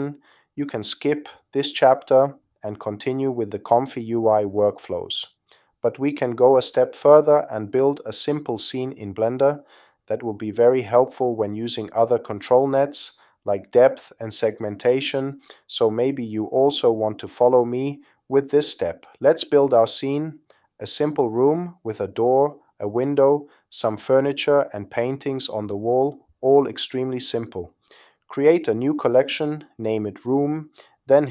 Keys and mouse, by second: 10.8 shift+a, 15.4 click, 18.8-19.8 drag, 22.2 click, 28.4 click.